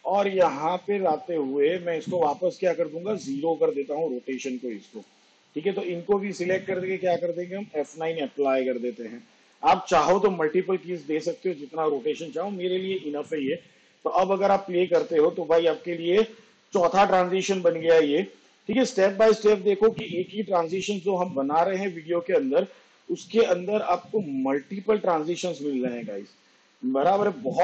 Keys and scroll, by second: 4.3 0, 8.2 F9, 15.1 space.